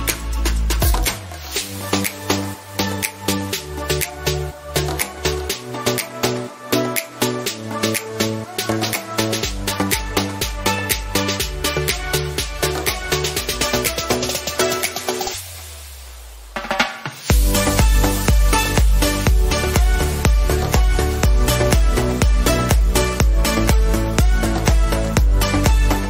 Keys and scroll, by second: 16.2 ctrl+alt+z, 20.1 ctrl+shift+z, 23.8 ctrl+alt+z.